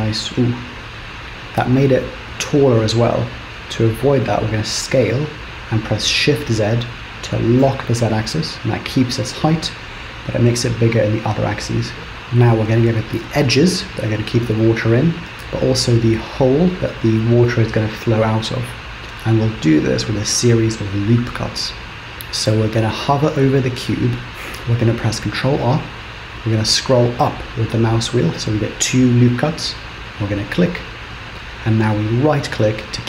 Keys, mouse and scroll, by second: 2.4 ctrl+z, 4.7 s, 24.3 ctrl+z, 25.3 ctrl+r.